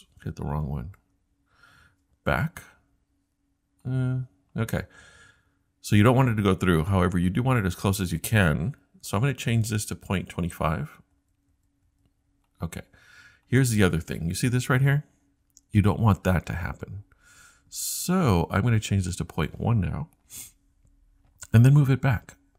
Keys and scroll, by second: 1.0 scroll up 1, 2.3 Right, 11.2 BackSpace, 11.5 BackSpace, 11.8 BackSpace.